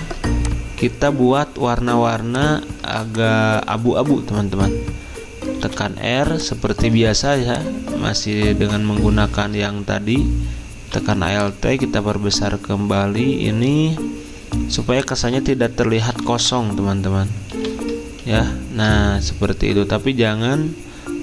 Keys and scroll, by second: 0.0 ctrl+z, 0.4-1.1 typing, 2.8-3.5 typing, 5.6 r, 17.5 v, 18.2 ctrl+[.